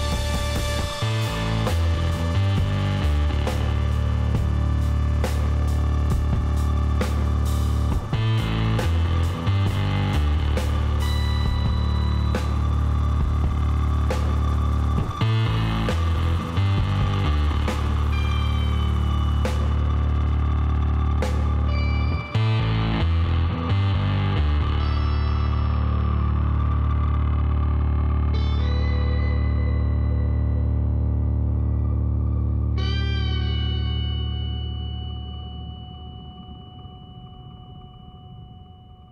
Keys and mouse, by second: 3.3 ctrl+r, 6.7 ctrl+z, 9.0 shift+a, 10.5 shift+s, 12.8 shift+a, 16.9-18.1 middle drag, 18.1-20.0 drag, 20.0-26.5 middle drag, 23.7 s, 26.9 middle click, 27.9 ctrl+z, 29.1-30.3 middle drag, 31.9-33.6 drag, 33.1 s, 36.2-38.9 middle drag, 38.9-39.1 drag.